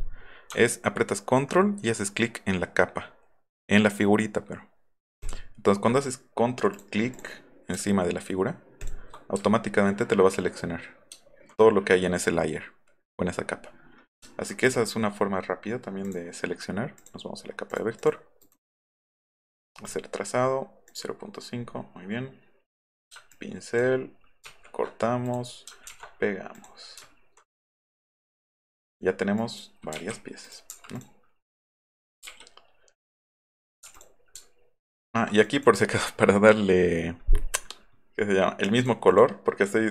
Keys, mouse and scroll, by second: 5.2 shift+click, 6.7 click, 7.1 click, 8.8 ctrl+click, 9.4 alt+scroll up 1, 11.2 alt+scroll up 2, 11.3 alt+scroll down 2, 14.2 alt+middle click, 14.2 alt+scroll down 1, 14.7 alt+scroll up 2, 16.1 click, 17.0 click, 18.4 right click, 19.9 click, 20.9 click, 22.7 click, 23.3 ctrl+click, 24.4 ctrl+x, 25.2 click, 25.8 ctrl+v, 27.1 alt+middle click, 27.8-28.5 drag, 28.8 drag, 29.4 drag, 30.0 u, 30.4 click, 30.7 v, 30.9 click, 31.7 drag, 32.2 u, 33.6 click, 33.9 click, 34.4 alt+middle click, 34.5 alt+middle click, 34.7 alt+middle drag, 35.1 alt+middle drag, 35.4 drag, 38.8 click, 39.1 click.